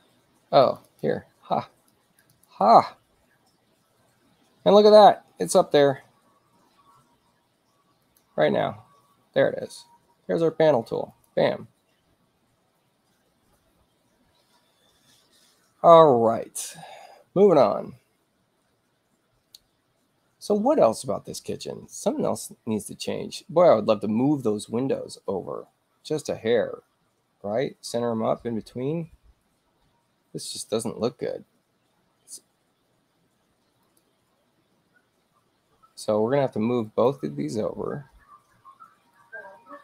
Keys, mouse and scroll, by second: 0.7 click, 0.9 click, 1.9 click, 2.3 click, 8.0 click, 11.1 click, 30.2 space, 33.9 click, 36.9 ctrl+click, 39.2 click.